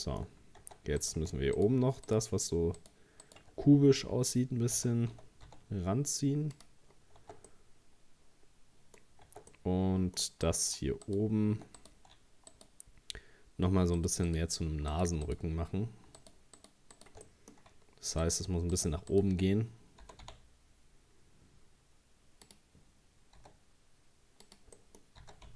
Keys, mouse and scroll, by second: 0.2-0.6 scroll up 3, 0.6 Tab, 1.0 right click, 1.6 shift+right click, 2.1 shift+right click, 2.8 shift+right click, 3.2 shift+right click, 3.7 scroll down 2, 4.8 g, 6.9-7.2 scroll down 1, 7.2 Tab, 7.5-9.0 middle drag, 9.0 scroll up 1, 9.3 Tab, 9.5 middle click, 10.5 right click, 11.1 shift+right click, 11.8 right click, 12.5 shift+right click, 14.0 shift+right click, 14.3 shift+right click, 14.9 shift+right click, 15.3 shift+right click, 16.2 shift+right click, 16.6 shift+right click, 17.0 shift+right click, 17.3 middle click, 18.2 shift+right click, 18.7 shift+right click, 19.1 shift+right click, 20.0 g, 23.4 s, 24.8 middle click, 25.2 s.